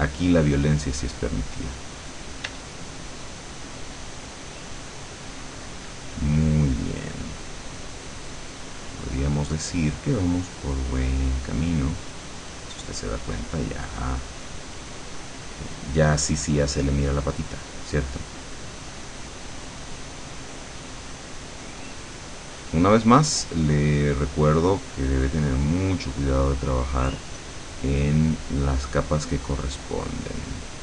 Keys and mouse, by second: 2.5 d, 2.8-5.3 drag, 6.3-13.0 drag, 13.5-18.1 drag, 18.5-22.3 drag, 22.5-26.0 drag, 26.3-30.5 drag, 30.7-30.8 drag.